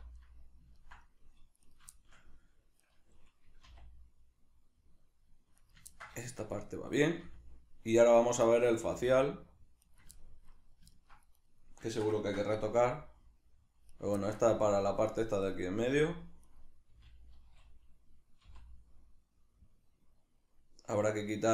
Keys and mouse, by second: 1.7 right click, 2.0-2.8 shift+middle drag, 2.8 right click, 3.6 r, 5.7 right click, 5.9-7.1 ctrl+middle drag, 7.1 right click, 7.2 r, 8.3 right click, 8.5-9.9 middle drag, 8.9 r, 9.9 right click, 10.2-11.4 ctrl+middle drag, 11.4 right click, 11.9-14.0 ctrl+shift+middle drag, 12.8 g, 14.0 right click, 14.3 ctrl+middle click, 14.5 g, 15.2 right click, 15.8 g, 16.6 right click, 16.9 r.